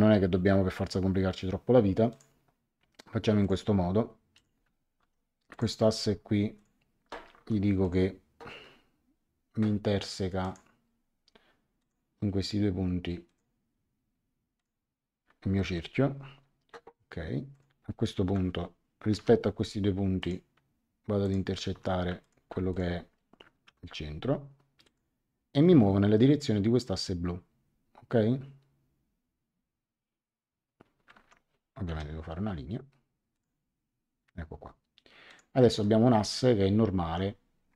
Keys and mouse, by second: 2.1 click, 3.4 click, 4.9 Escape, 5.5 click, 6.5 click, 7.3 Escape, 7.8 click, 10.4 click, 11.7 click, 13.2 click, 14.5 click, 15.6 Escape, 17.5 click, 18.2 Delete, 19.1 l, 20.2 click, 21.2 click, 21.7 Escape, 22.2 click, 22.4 x, 22.7 click, 23.6 c, 24.8 click, 31.1 Escape, 31.9 l, 33.3 click, 35.2 click, 37.0 Escape.